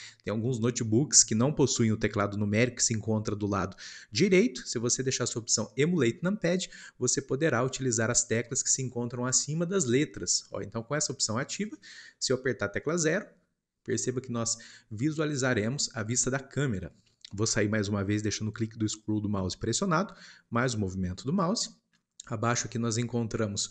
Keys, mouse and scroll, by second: 12.8 KP_0, 13.8-19.8 scroll up 1, 19.8-21.2 middle drag, 21.2 scroll down 2.